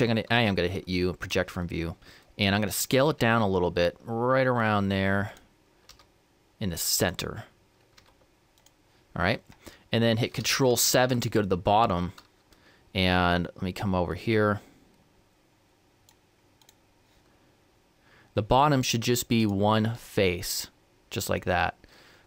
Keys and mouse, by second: 0.2 u, 3.3 s, 5.9 g, 8.1 g, 14.5-16.2 drag, 16.7-18.3 drag, 18.3-19.4 middle drag, 19.4-21.1 right drag.